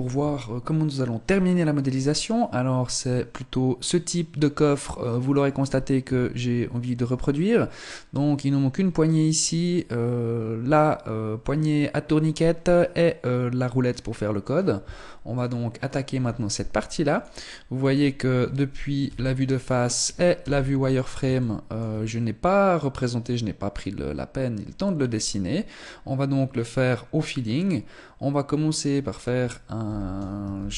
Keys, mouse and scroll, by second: 17.3 click, 18.5 KP_1, 19.2-19.7 scroll down 2, 19.9 z, 20.8 shift+middle click, 25.2-27.0 scroll up 1, 27.0-28.4 scroll down 2, 29.3 ctrl+c, 30.1 shift+c.